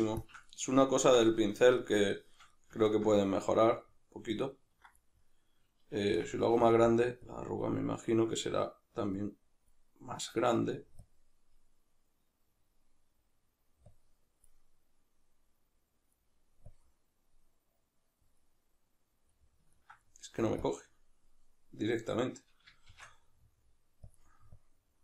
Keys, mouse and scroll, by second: 0.5-6.7 middle drag, 6.1 f, 6.7 click, 8.3-19.3 drag, 19.3-21.6 middle drag, 21.6-24.1 drag, 22.8 shift+f.